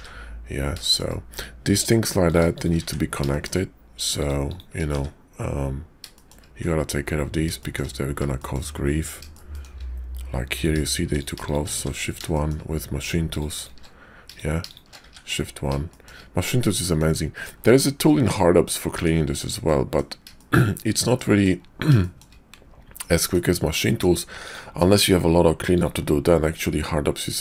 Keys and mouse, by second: 0.8 shift+click, 2.2 click, 2.5 shift+click, 2.7 1, 3.3 shift+click, 4.4 shift+click, 4.8 1, 6.1 shift+click, 7.6 shift+click, 8.3 shift+click, 9.3 shift+click, 10.4 click, 11.4 shift+click, 11.7 shift+1, 12.3 shift+click, 14.1 click, 15.0 shift+1, 15.8 shift+click, 16.8 shift+click, 18.0 middle click, 19.0 Tab, 19.6 click, 19.7 middle click, 19.8 click, 20.3 shift+click, 21.1 middle click, 22.0 shift+middle click, 22.9 middle click, 23.8 shift+click, 24.7 alt+x, 25.7 click, 26.8-27.4 middle drag.